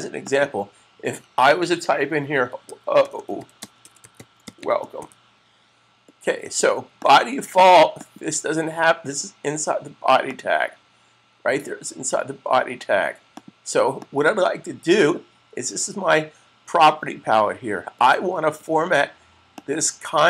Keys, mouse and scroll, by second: 0.1 click, 2.1-5.4 typing, 6.9 click, 13.2 click, 19.4 click.